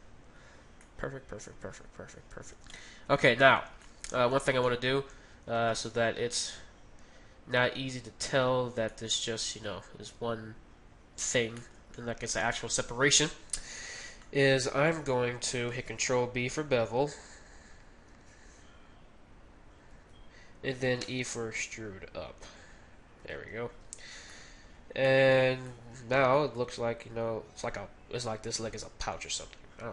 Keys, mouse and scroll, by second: 2.5 Tab, 5.6-7.7 right drag, 8.3 z, 8.5-8.9 scroll up 1, 8.9-11.2 middle drag, 11.6-11.9 scroll up 1, 11.9-14.2 middle drag, 13.8 z, 14.2-16.0 middle drag, 16.0 ctrl+b, 18.2 ctrl+b, 21.0 ctrl+b, 21.0 e, 21.8 e, 23.8 z, 24.0-25.1 middle drag, 25.3 z, 25.9 Tab, 26.4-28.2 drag, 28.3 middle click.